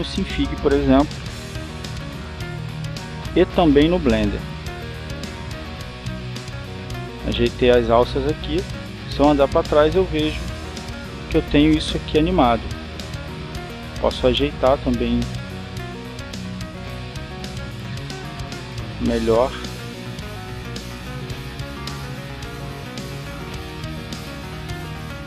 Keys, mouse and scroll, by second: 1.7 click, 3.6-6.6 drag, 7.1 click, 9.9-14.4 drag, 15.9 click, 18.9 click, 21.2-25.2 drag.